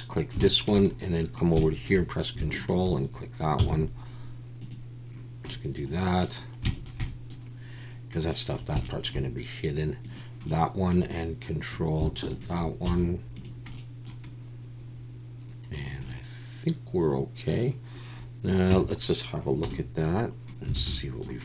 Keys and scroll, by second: 3.6 x, 12.9 x, 18.7 Tab, 19.6 /, 20.7 alt+a.